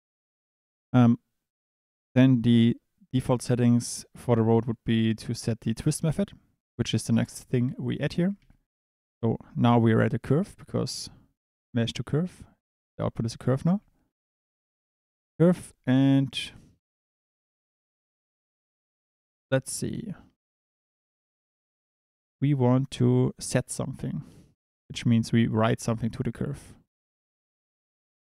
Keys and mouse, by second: 0.5 click, 7.2 click, 7.8 click, 8.4 shift+a, 13.5 click, 13.7 shift+a.